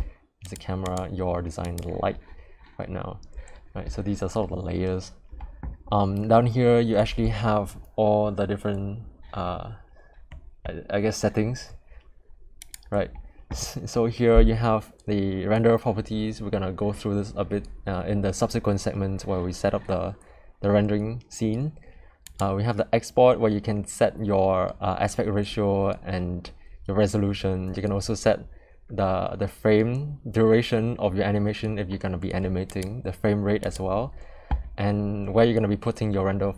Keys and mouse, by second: 22.3 click.